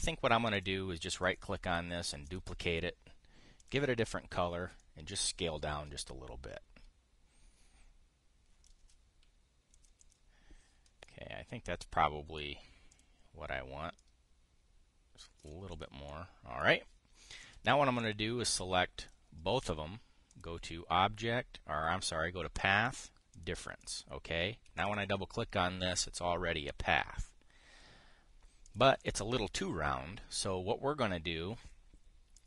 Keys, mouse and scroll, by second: 1.3 click, 1.9 click, 2.9 click, 4.3 click, 5.5-9.5 ctrl+shift+drag, 10.5 drag, 10.7 drag, 13.1 click, 16.2-16.8 drag, 17.4-18.2 drag, 18.7-19.9 drag, 21.0 click, 24.0 click, 24.5 click, 25.5 click, 29.3 click, 29.7 drag.